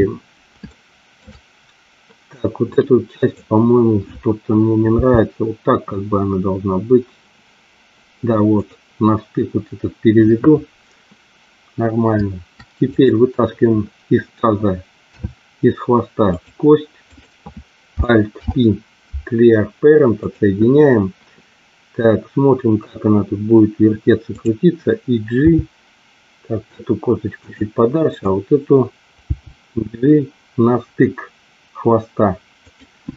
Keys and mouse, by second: 0.6 shift+middle click, 2.8 click, 4.8 g, 12.8 click, 15.2 e, 16.3 click, 17.0 click, 18.4 alt+p, 24.3 click, 25.4 g, 27.4 click, 28.2 click, 29.3 g, 32.6 click.